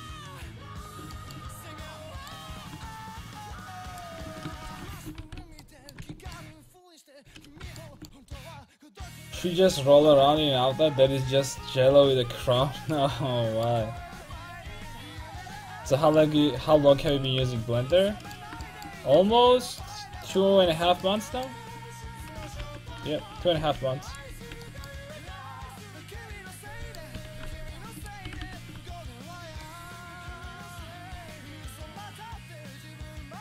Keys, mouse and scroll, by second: 0.9-2.0 middle drag, 3.1-4.7 right drag, 4.7 ctrl+x, 5.0 a, 5.3 ctrl+t, 5.4 a, 5.6 middle click, 6.1 Tab, 8.0 ctrl+i, 13.2-16.5 middle drag, 17.8 alt+z, 20.3 click, 20.9 Tab, 22.7 alt+h, 23.1 a, 23.6 k, 24.4 l, 25.6-27.5 drag, 25.6 right click, 27.5 r, 28.3 r, 29.4 click, 32.2-33.4 drag.